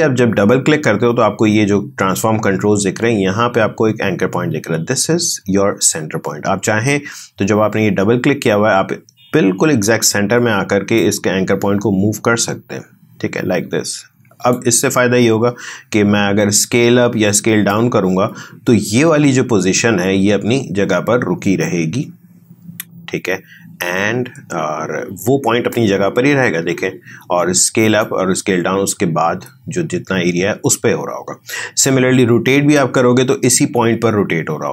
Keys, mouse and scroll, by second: 10.9-17.1 drag, 17.7-27.7 drag, 28.0-34.7 drag.